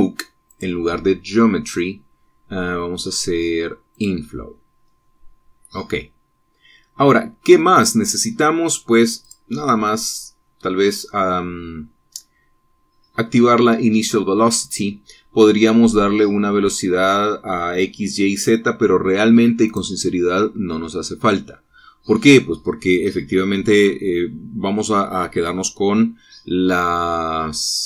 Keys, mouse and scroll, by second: 1.4 click, 4.9 click, 6.1-6.8 scroll down 1, 6.8-10.2 scroll down 1, 10.2 click, 11.1-15.3 scroll down 2, 20.6 click, 23.0-26.3 scroll down 2.